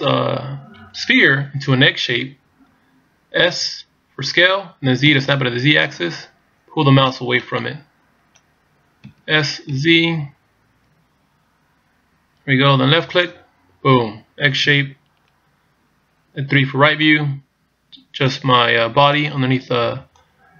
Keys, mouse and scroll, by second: 7.5 right click, 9.1 s, 14.7 KP_3, 17.1 click, 20.2 click.